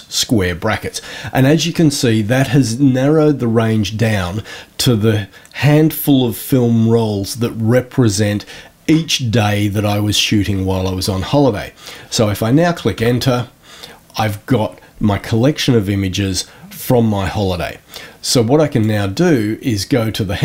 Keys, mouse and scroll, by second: 18.7 click.